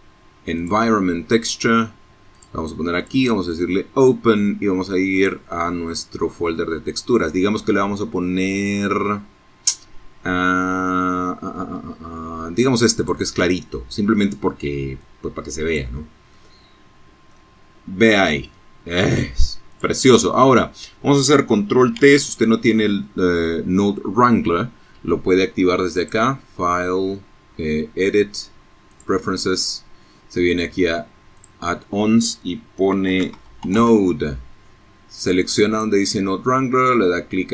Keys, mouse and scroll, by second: 0.4 click, 1.0 click, 3.2 click, 6.9-8.3 scroll down 3, 8.6-9.3 scroll down 4, 9.5-10.0 scroll up 2, 11.1 click, 13.1 click, 14.4-15.6 drag, 16.9-17.4 scroll down 2, 17.7 click, 18.4 scroll down 2, 20.0 ctrl+t, 24.0 click, 27.0 click, 29.4 click, 31.1 n, 31.4 o, 31.7 d, 31.8 e, 33.8 click, 37.1 click.